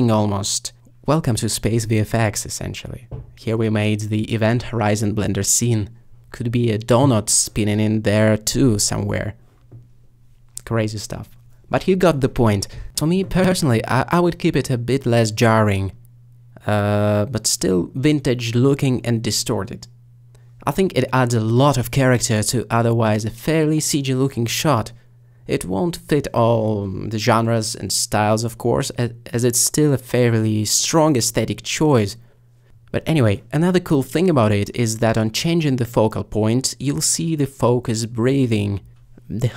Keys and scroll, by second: 12.4 g, 13.9 s, 15.5 g, 16.3 s, 18.7 g, 35.0 alt+g.